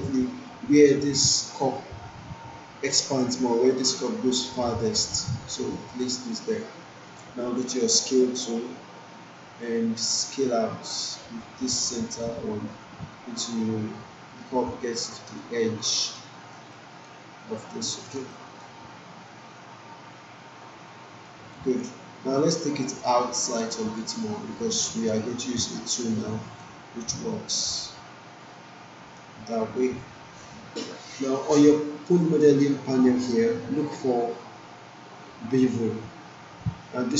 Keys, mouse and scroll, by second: 8.1 click, 9.3 alt+click, 9.9 alt+click, 11.7-15.2 drag, 15.4 alt+middle click, 15.9-16.7 alt+right click, 16.3 alt+middle click, 16.7-17.4 alt+right click, 17.9 alt+middle click, 18.3 alt+right click, 19.6-21.5 drag, 21.6 alt+right click, 23.0-25.1 click, 24.1 alt+right click, 25.1-25.7 alt+middle click, 26.3-26.9 alt+right drag, 27.6-28.5 drag, 29.3 alt+middle click.